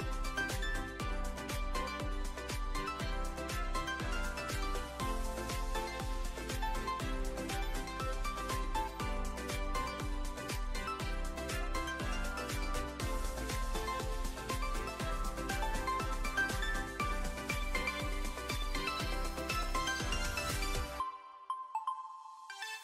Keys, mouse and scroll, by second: 1.5-2.9 drag, 3.8 Tab, 4.4-5.7 drag, 6.6 click, 7.7-9.1 drag, 10.7 ctrl+2, 12.1 right click, 13.9 shift+middle click, 14.3 Tab, 14.9 Tab, 15.3 s, 15.4 z, 16.5 click, 16.9 shift+middle drag, 18.0 Tab, 18.5 2, 18.9 click, 19.5 e, 21.2 z, 22.7 s.